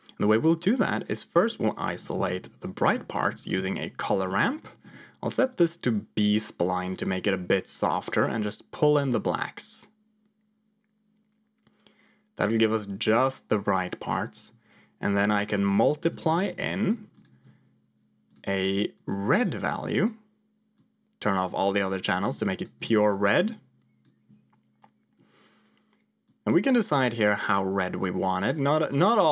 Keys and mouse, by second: 1.0-2.4 drag, 4.4 middle click, 5.5-7.0 drag, 8.0-14.1 drag, 15.1-16.5 drag, 18.2 click, 22.5 ctrl+shift+click, 23.0-24.0 drag, 26.1-29.3 drag.